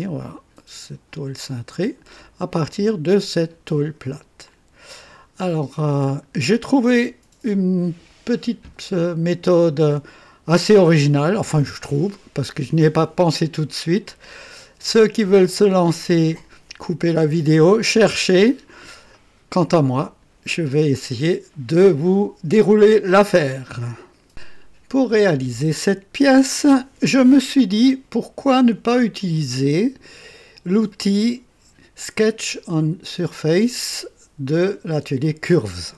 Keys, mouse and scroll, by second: 0.2-2.2 drag, 2.4-3.7 drag, 4.4 click, 6.0 click, 6.8-9.2 right drag.